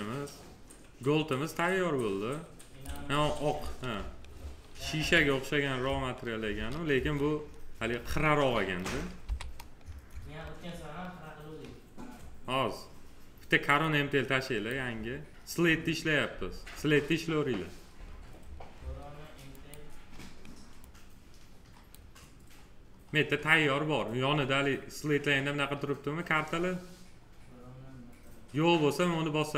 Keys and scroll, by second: 4.9 z, 6.9 F4.